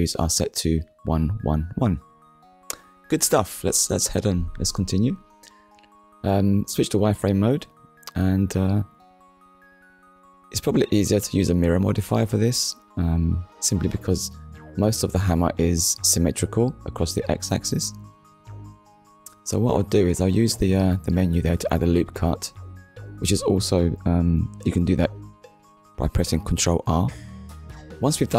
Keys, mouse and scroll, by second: 2.0 click, 3.0 KP_1, 5.4 click, 10.4 middle click, 12.4 click, 13.4 click, 15.8 click, 18.4 Tab, 20.5 click, 22.1 click, 24.0 click, 25.6 click, 26.5 click, 27.0 shift+click, 27.4 middle click, 28.2 shift+click.